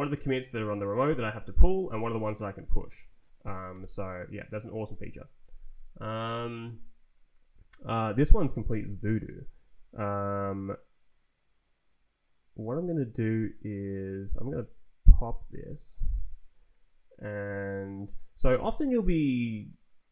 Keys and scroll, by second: 0.1 Up, 1.5 Down, 2.2 Down, 3.6 Escape, 8.6 ctrl+t, 9.4 Right, 14.3 Down, 15.1 g, 15.4 Return, 15.9 Left, 16.4 Down.